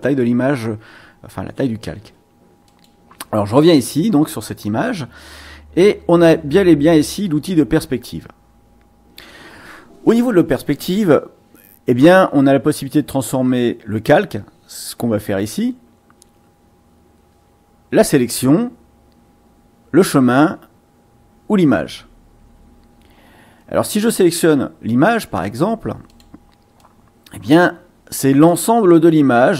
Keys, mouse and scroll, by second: 2.6 click, 26.1 click, 26.7-28.6 drag.